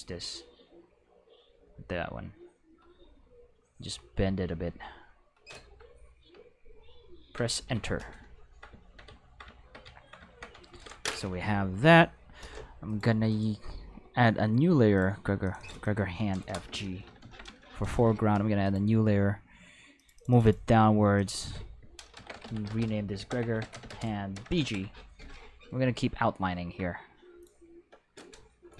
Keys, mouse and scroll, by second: 1.1-2.7 drag, 3.4 click, 4.6 click, 7.4 Return, 10.7 ctrl+s, 12.9 click, 13.3 click, 14.9 click, 15.4 click, 15.6 click, 15.8 click, 16.3 space, 17.1 shift+f, 17.2 shift+g, 17.5 Return, 18.6 click, 20.0 click, 20.2 click, 20.3 click, 20.4 click, 21.2 click, 21.3 click, 22.2-24.5 typing, 24.7 Return, 27.4 click.